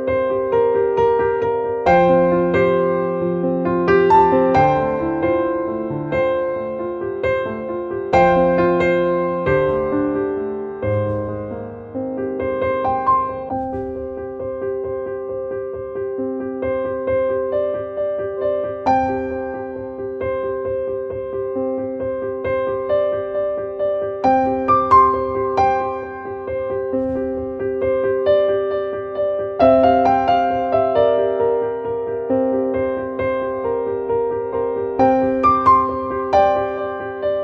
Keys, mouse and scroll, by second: 1.0 click, 2.7 click, 9.8-13.8 drag, 14.4-16.2 drag, 20.7-26.0 drag, 26.5-28.1 drag, 28.1-30.9 drag, 31.2-32.6 drag, 33.0 click, 35.9 click.